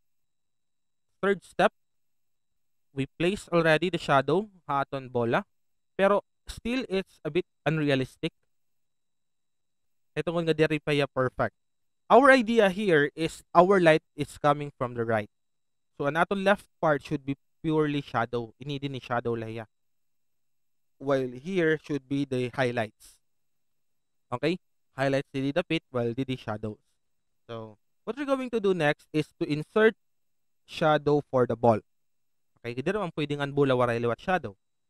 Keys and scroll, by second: 6.0 alt+space, 27.6 alt+space.